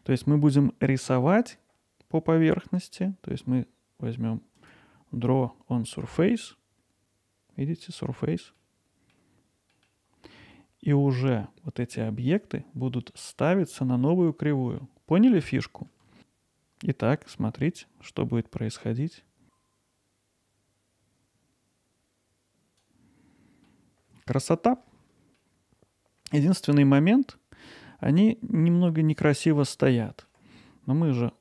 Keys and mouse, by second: 4.6 click, 8.6 middle click, 9.8 middle click, 10.3 middle click, 14.8 middle click, 16.2-22.8 drag, 23.7 middle click, 25.4-30.3 alt+middle drag, 31.1 middle click.